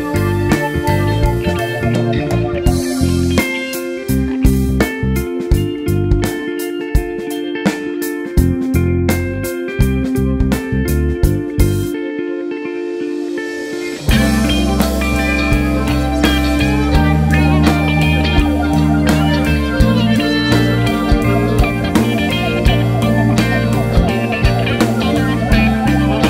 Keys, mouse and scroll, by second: 1.2 click, 1.4 KP_0, 1.5 scroll up 1, 1.9 scroll down 1, 2.8 click, 4.3 KP_1, 4.8 click, 5.1 alt+a, 7.1-9.2 typing, 7.1 click, 7.8 click, 8.4 click, 8.8-9.2 scroll down 1, 10.0 click, 10.5 s, 10.8 click, 11.0 alt+a, 12.8 click, 13.9 click, 14.4 KP_1, 14.5 g, 14.8 click, 14.9 alt+a, 15.1 KP_0, 16.6 click, 21.4-26.2 drag, 25.4-25.7 scroll up 2, 25.9 scroll down 1.